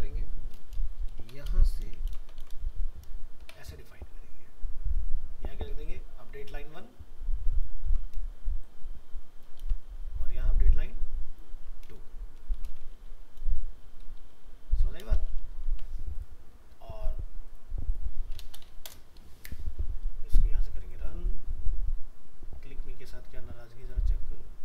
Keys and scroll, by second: 1.5 ctrl+c, 2.1 ctrl+v, 7.9 ctrl+c, 9.6 ctrl+v, 15.4 ctrl+s.